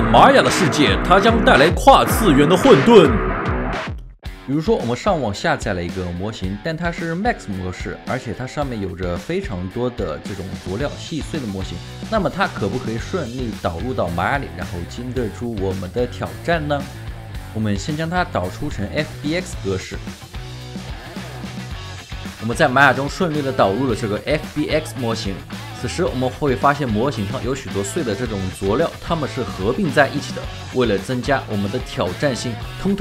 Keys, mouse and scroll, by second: 4.2 ctrl+alt+shift+4, 5.5 alt+click, 6.9 alt+right click, 10.9 alt+click, 12.3 alt+click, 13.7 alt+right click, 14.1 alt+middle click, 14.7 alt+right click, 15.7 alt+middle click, 17.3 typing, 20.9 Return, 22.5 alt+click, 24.8 alt+click, 25.4 alt+right click, 27.2 alt+middle click, 27.4 alt+right click, 30.8 alt+right click, 31.4 double click, 32.4 double click, 32.6 shift+right click.